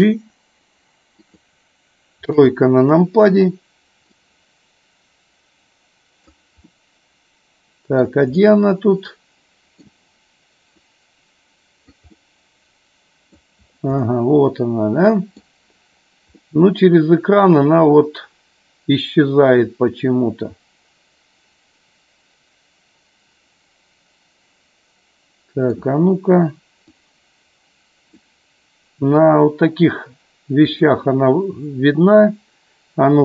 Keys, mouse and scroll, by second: 1.3 click, 2.3 KP_3, 4.0-6.3 drag, 6.8-8.2 middle drag, 8.4-9.8 middle drag, 11.0 click, 12.3-13.6 middle drag, 14.0-15.4 middle drag, 16.4-25.9 middle drag, 26.9-28.3 drag, 29.2-30.8 drag.